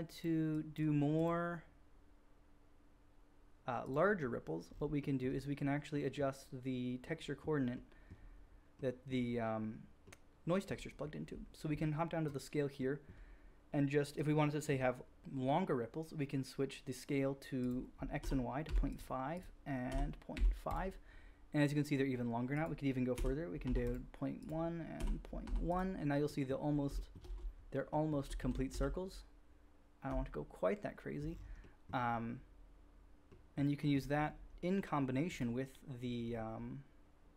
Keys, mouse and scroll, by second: 6.0-18.9 middle drag, 18.9 click, 19.3-20.7 middle drag, 20.7-22.5 drag, 22.5-23.9 middle drag, 23.9 click, 24.4-25.7 middle drag, 25.7-28.1 drag, 28.4 ctrl+z, 28.7 ctrl+z, 30.1-37.3 drag.